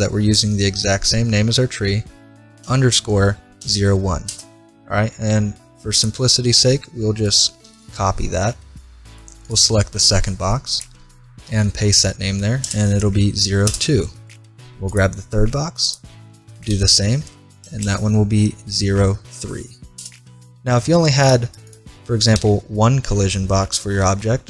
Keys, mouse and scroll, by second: 5.9-7.8 drag, 9.5-10.7 right drag, 10.7 middle click, 11.3-12.6 drag, 14.9-16.8 right drag, 15.9-17.7 drag, 21.2-23.8 right drag, 22.4 h.